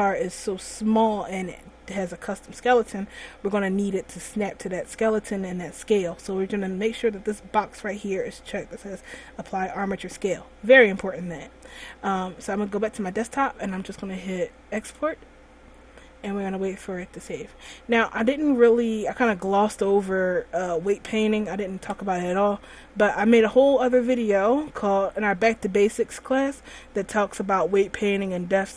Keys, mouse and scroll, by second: 17.0 click.